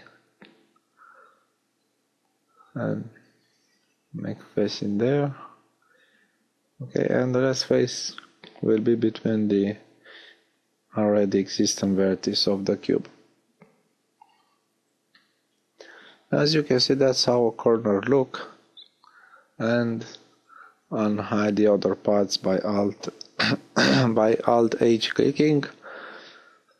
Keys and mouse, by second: 1.6 f, 5.4 f, 10.8 f, 13.2 a, 16.0 alt+h.